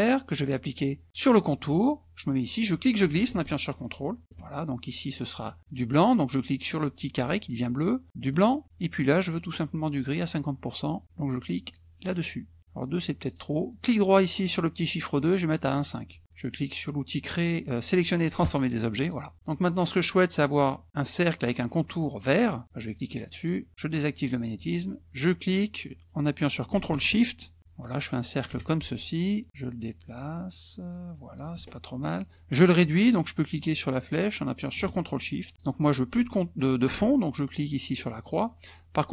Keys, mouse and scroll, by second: 2.6-4.4 drag, 5.1 click, 8.5 click, 9.1 click, 12.1 click, 13.3 right click, 15.7 click, 18.4 click, 19.0 click, 19.3 KP_Subtract, 23.3 click, 24.3 click, 25.2-28.6 drag, 29.5-31.5 drag, 34.0-35.8 drag, 38.3 click.